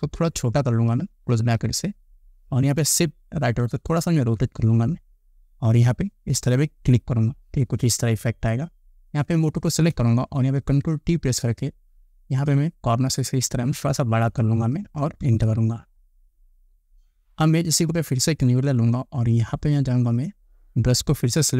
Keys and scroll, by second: 1.1 [, 3.8 shift+Right, 10.8 ctrl+t, 15.5 Return.